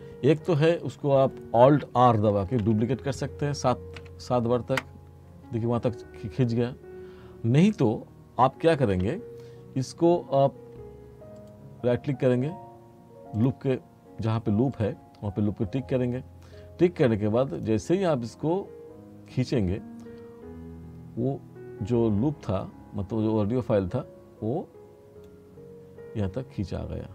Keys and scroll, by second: 2.5 r, 4.1 7, 4.8 Return, 9.0 ctrl+z.